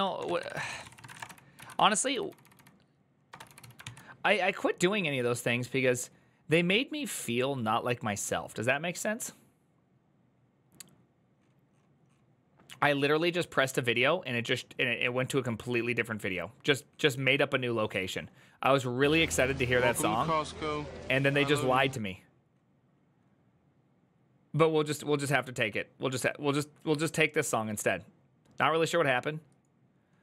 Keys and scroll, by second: 0.0-3.9 typing.